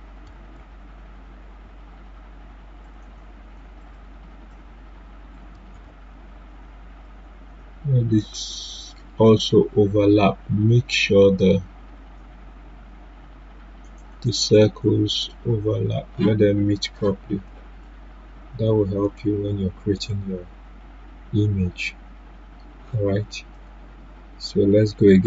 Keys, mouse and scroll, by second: 0.5 ctrl+Left, 2.8 click, 5.7 z, 7.0-19.0 drag, 19.0 right click, 23.5 right click, 23.5-25.2 drag.